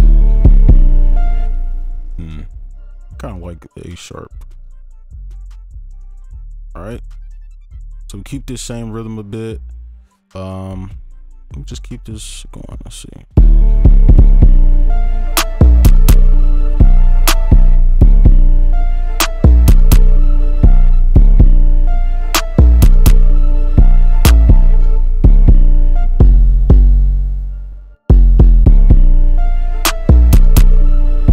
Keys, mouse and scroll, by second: 1.4 space, 4.0 right click, 4.8 ctrl+click, 5.2 shift+Down, 6.1 shift+Down, 6.3 shift+Down, 6.5 shift+Down, 7.2 ctrl+Up, 7.6 right click, 12.6 ctrl+click, 13.0 shift+click, 13.3 shift+space, 17.7 space, 18.0 space, 20.9 space, 21.1 space, 21.5 ctrl+click, 22.6 ctrl+Up, 23.8-24.9 shift+scroll down 1, 25.2 space, 28.6 space, 30.0 right click.